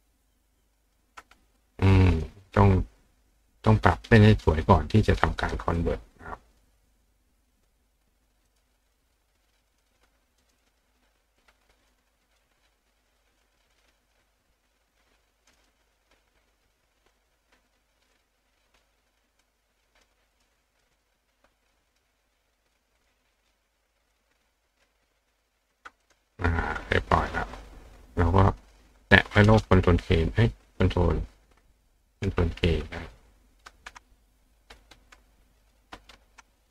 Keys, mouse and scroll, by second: 0.3 click, 1.5 click, 2.1 click, 4.5 click, 5.8-6.6 drag, 6.9 click, 7.7 click, 8.5 click, 8.9 click, 9.7 click, 9.9 click, 10.4 click, 10.6 click, 11.4 click, 12.4-13.4 drag, 13.6 click, 14.0 click, 15.4 click, 15.6 click, 16.4 click, 16.7-17.1 drag, 18.1 click, 19.4-20.0 drag, 20.3 click, 20.8 click, 21.9 click, 22.3 click, 22.8 click, 23.0 click, 23.4 click, 24.0 click, 24.9 click, 25.7 click, 26.0 click, 27.5 click, 33.0 click, 34.4 click, 35.6 click, 36.6 click.